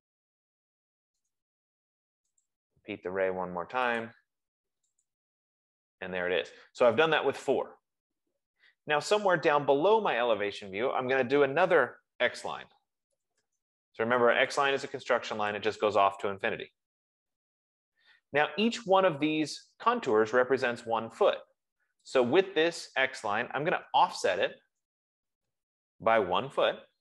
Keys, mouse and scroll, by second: 1.7 Return, 1.7 right click, 2.7 click, 4.4 click, 5.4 click, 12.5-14.1 typing, 14.9 click, 16.0 click, 16.8 Return, 22.5 click, 24.0-27.0 typing, 24.3-27.0 drag.